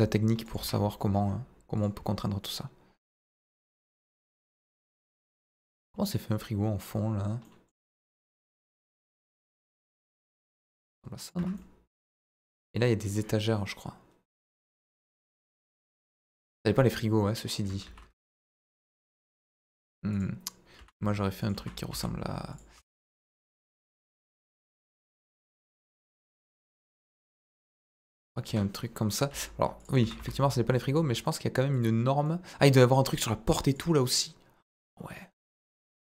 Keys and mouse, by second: 0.6 Tab, 0.7 middle click, 1.8 click, 2.0 middle click, 3.0 middle click, 3.7 ctrl+b, 5.2 Escape, 6.0 click, 7.4 middle click, 8.8 ctrl+b, 11.2 click, 11.3 Tab, 11.5 middle click, 12.4 right click, 15.6 click, 16.5 KP_0, 16.8 KP_1, 17.8 shift+s, 18.9 shift+a, 20.7 s, 21.4 click, 21.5 s, 21.9 z, 22.5 click, 22.7 s, 22.8 middle click, 23.9 click, 24.1 middle click, 24.7 s, 24.8 middle click, 26.1 click, 27.2 middle click, 27.8 click, 28.4 KP_1, 29.3 g, 29.7 click, 29.9 s, 30.1 z, 30.7 click, 31.2 middle drag, 31.7 click, 32.2 middle click, 33.6 click.